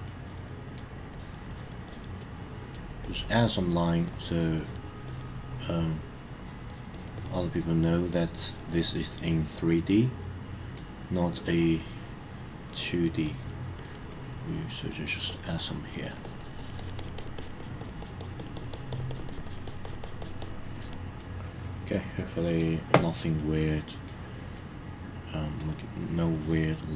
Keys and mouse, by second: 0.1 middle click, 1.1 click, 1.5 click, 1.9 click, 2.2 middle click, 3.0 click, 3.4 click, 4.1 click, 4.6 click, 5.1 click, 6.0 click, 6.4 click, 6.7 click, 6.9 click, 7.1 click, 7.5 click, 8.0 click, 8.4 click, 8.9-10.7 middle drag, 11.5-12.9 middle drag, 13.2 click, 13.8 click, 14.1 middle click, 15.3 click, 15.5 click, 15.9 click, 16.0 click, 16.2 click, 16.4 click, 16.6 click, 16.8 click, 17.0 click, 17.2 click, 17.4 click, 17.6 click, 17.8 click, 18.0 click, 18.2 click, 18.4 click, 18.5 click, 18.7 click, 18.9 click, 19.1 click, 19.3 click, 19.4 click, 19.6 click, 19.8 click, 20.0 click, 20.2 click, 20.4 click, 20.7 click, 21.2-22.6 middle drag, 23.4 middle click, 24.6-25.6 middle drag, 26.3 click.